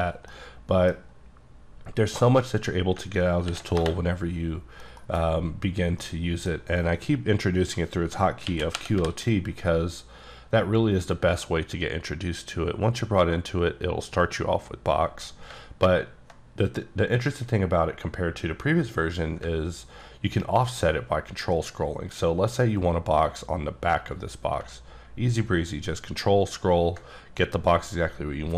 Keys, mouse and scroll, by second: 0.3 middle click, 3.5 ctrl+n, 3.8 Return, 5.0 KP_Decimal, 5.5-6.0 scroll down 2, 6.0 middle click, 8.5-9.0 typing, 20.1-22.4 ctrl+scroll down 11, 23.0-25.5 ctrl+scroll down 6.